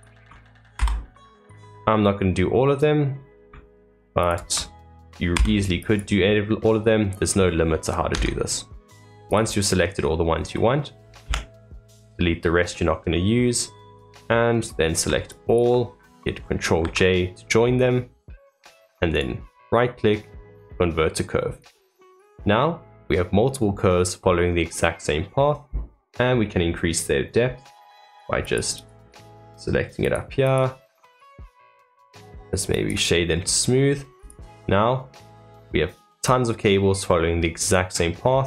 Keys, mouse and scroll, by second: 1.8-4.1 middle drag, 4.1 alt+click, 7.2 middle click, 8.1 Tab, 9.2 click, 9.7-11.2 middle drag, 11.2 x, 12.5-13.0 scroll down 2, 13.0-13.8 middle drag, 13.8 click, 14.2-14.7 middle drag, 14.7-15.2 scroll up 1, 15.2 shift+click, 16.8 ctrl+j, 17.9-19.1 middle drag, 19.1-22.3 right drag, 22.3-25.3 middle drag, 26.3-28.4 scroll down 1, 28.4-31.5 drag, 31.5-33.3 right drag, 33.3-33.8 middle drag, 33.8 scroll up 2, 34.1 click, 34.6-37.9 middle drag, 37.9-38.3 scroll up 1, 38.3 middle click.